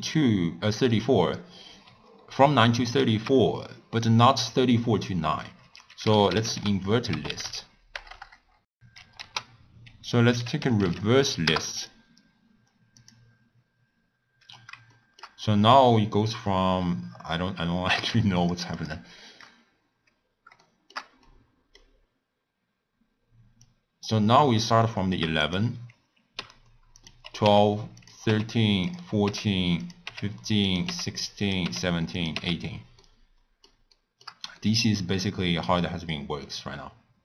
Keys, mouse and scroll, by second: 3.0 ctrl+a, 8.1 BackSpace, 14.9-18.3 shift+middle drag, 18.3 shift+click, 20.1-20.6 scroll down 1, 20.6-22.0 shift+middle drag, 22.0-23.5 scroll up 1, 23.5-24.8 drag, 24.8-25.4 shift+middle drag, 25.4 click, 26.3 h, 26.9 click, 27.4-32.3 typing, 28.0 click, 28.8 click, 29.8 click, 30.6 click, 31.4 click, 32.1 click, 33.0-37.2 middle drag.